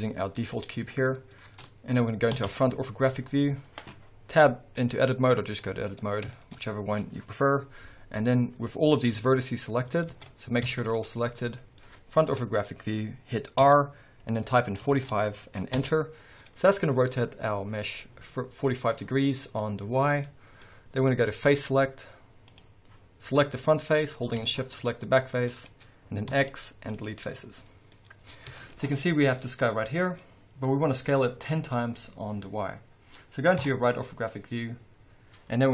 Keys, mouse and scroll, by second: 0.5 click, 2.3 KP_5, 2.4 KP_1, 3.2-4.7 scroll up 1, 4.7-6.3 drag, 6.0 scroll down 1, 6.3-10.9 shift+middle drag, 6.5 scroll up 1, 9.1 a, 10.0 alt+a, 12.2 KP_1, 13.6 r, 15.8 Return, 16.7-19.2 scroll up 1, 19.2 middle click, 19.6-20.2 scroll down 1, 20.2 middle click, 21.2 middle click, 21.5 click, 22.5 click, 23.2 click, 23.7-24.7 middle drag, 24.7 shift+click, 26.3 x, 27.3-28.7 middle drag, 28.4 a, 28.8-35.7 middle drag, 30.2-31.4 scroll down 2, 31.4-33.6 scroll down 1, 33.6 KP_3, 34.4-34.9 scroll up 2, 34.9-35.7 scroll up 1.